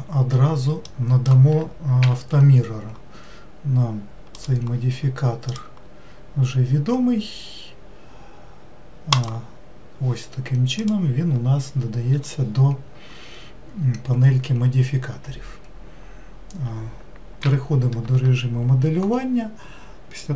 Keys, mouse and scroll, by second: 0.8-2.0 drag, 2.0 n, 4.3 click, 5.5-8.5 drag, 9.1-10.9 drag, 17.4 n, 18.1 Tab.